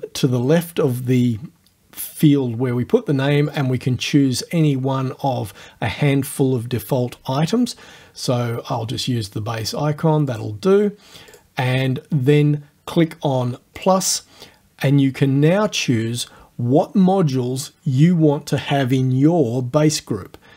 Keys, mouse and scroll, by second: 3.5 click, 10.3 click, 11.4 click, 13.8 click, 15.3 scroll down 1, 18.2-18.5 scroll up 1.